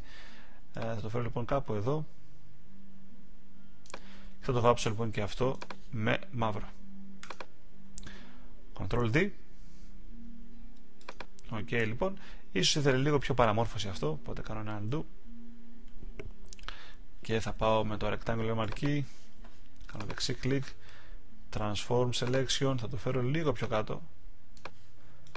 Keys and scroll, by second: 8.9 super+d, 13.8 alt+super+z.